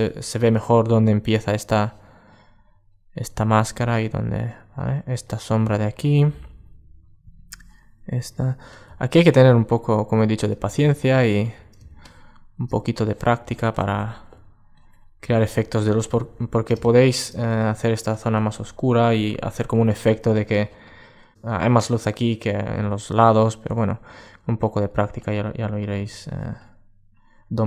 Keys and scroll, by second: 15.5 alt+space.